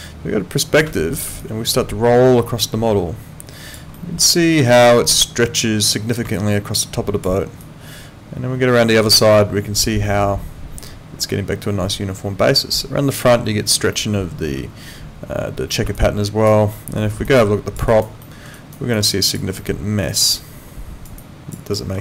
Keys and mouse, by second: 1.4 alt+click, 3.9 alt+middle click, 6.3 alt+click, 7.6 alt+click, 16.0 alt+click, 16.7 alt+middle click, 17.3 alt+click, 17.9 alt+right click, 18.2 alt+middle click, 18.5 alt+right click, 18.9 alt+click, 19.6 alt+middle click, 20.1 alt+right click, 21.2 alt+click, 21.7 alt+middle click.